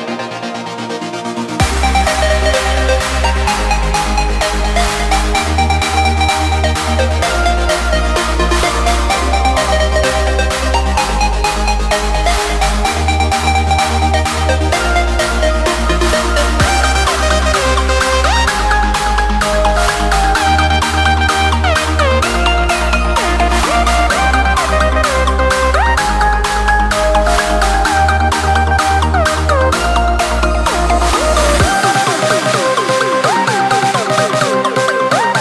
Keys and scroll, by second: 0.3 ctrl+space, 3.2 ctrl+v, 4.8 ctrl+space, 6.0 ctrl+space, 9.3 ctrl+space, 10.4 ctrl+v, 13.2 ctrl+space, 14.9 ctrl+v, 15.3 ctrl+space, 21.0 ctrl+space, 27.3 ctrl+space, 31.2 ctrl+s, 32.6 ctrl+space.